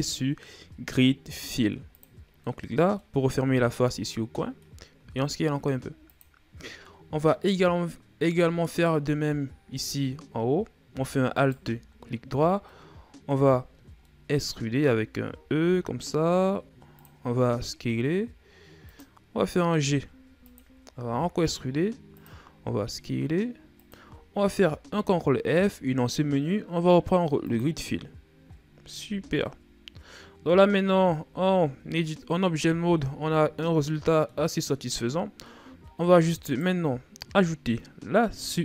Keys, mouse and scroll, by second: 2.2-4.8 middle drag, 4.8 s, 6.3-6.6 scroll down 2, 6.6-8.5 middle drag, 8.5-8.9 shift+scroll up 5, 9.1 middle click, 9.8-11.1 scroll up 1, 11.1 alt+right click, 12.5 middle click, 13.3-13.8 ctrl+scroll up 6, 13.8-14.9 middle drag, 14.9-15.4 shift+scroll up 1, 15.4 e, 19.5 g, 20.8 e, 22.3 s, 24.6 ctrl+f, 28.3 scroll down 3, 28.8 Tab, 29.0 scroll down 2, 29.2-31.1 middle drag, 31.1 ctrl+s, 31.8-32.6 middle drag, 32.6 a, 33.0-33.4 scroll down 2, 33.4-34.7 middle drag, 34.7-35.3 scroll up 3, 35.3-36.2 middle drag, 36.2 right click.